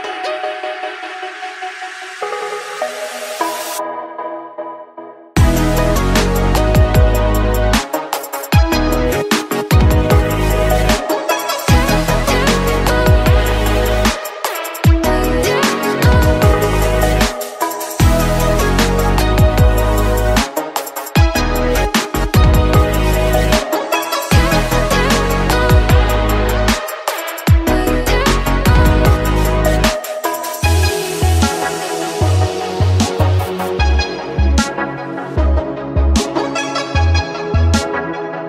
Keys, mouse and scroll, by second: 1.2 KP_7, 2.6 click, 4.4 click, 5.2 shift+click, 6.0-6.3 drag, 8.7 click, 9.7 click, 10.8 shift+click, 11.7 click, 13.6-14.8 middle drag, 14.8 click, 16.7-17.7 middle drag, 17.7 click, 19.2 click, 20.2-21.4 middle drag, 21.4 shift+click, 22.2 click, 26.3 click, 27.4 click, 31.6 click, 32.7 click, 34.1-35.1 middle drag, 35.1 Tab, 35.4 click, 35.7 Tab, 37.0 z, 38.1 middle click.